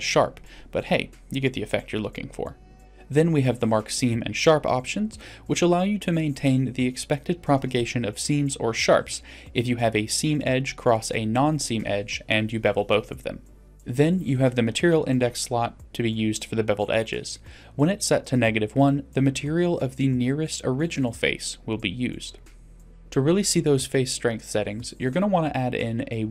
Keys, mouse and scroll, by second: 2.8 Tab, 3.4 click, 4.7 Tab, 5.0 middle click, 5.3 scroll up 1, 5.4 middle click, 6.1 middle click, 6.3 scroll up 1, 8.1 click, 8.3 click, 8.6 click, 9.3 click, 9.8 shift+middle click, 10.1 click, 10.3 click, 10.5-10.8 scroll down 2, 10.7 middle click, 11.3 ctrl+z, 11.5 ctrl+z, 11.7 ctrl+z, 11.8 ctrl+z, 12.0 ctrl+z, 12.1 ctrl+z, 25.5 click.